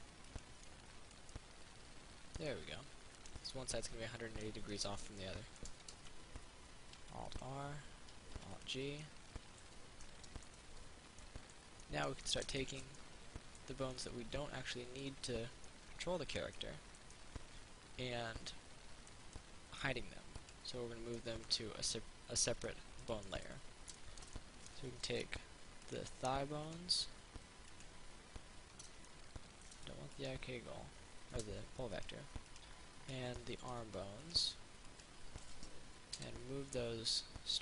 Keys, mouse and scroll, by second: 0.5 click, 0.9-6.7 middle drag, 7.2 alt+r, 7.5 click, 8.6 alt+g, 8.8 click, 9.2 middle click, 11.4 alt+middle click, 12.0 alt+middle click, 20.6 right click, 21.4 middle click, 22.6 middle click, 26.1 shift+right click, 28.0 shift+right click, 29.3 middle click, 30.4 shift+right click, 32.2 shift+right click, 32.7 shift+right click, 36.6 m.